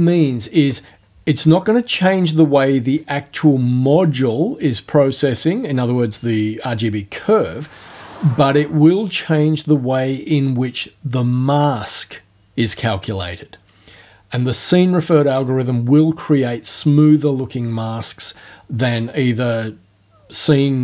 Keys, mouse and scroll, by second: 0.5 click.